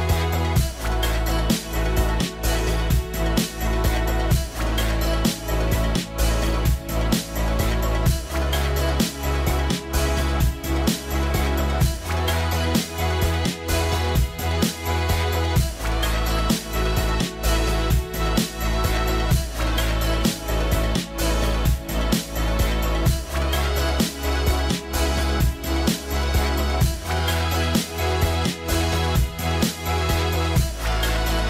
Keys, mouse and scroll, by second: 2.7 scroll up 1, 2.8 scroll down 1, 2.8 middle click, 4.7-5.0 scroll up 1, 5.0 scroll down 1, 5.7 middle click, 6.3-6.9 scroll up 1, 7.0 middle click, 12.3 right click, 15.9 middle click, 18.0 scroll down 1, 19.3 middle click, 19.3-19.6 scroll down 1, 19.8 scroll up 1, 20.5 middle click, 20.8-21.2 scroll up 1, 21.8 scroll down 1, 21.9 middle click.